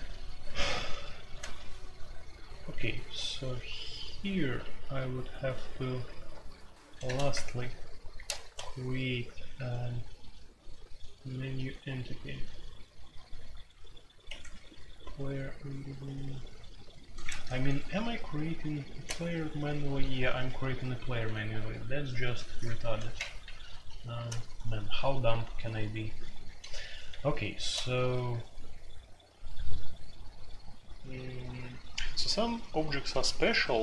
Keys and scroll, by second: 0.0-7.0 typing, 7.3 Return, 8.1 Return, 8.4 shift+9, 14.2 Escape, 17.5 ctrl+d, 18.1 ctrl+d, 19.8-21.5 typing, 23.2 ctrl+u, 23.7 ctrl+u, 24.2-27.6 typing.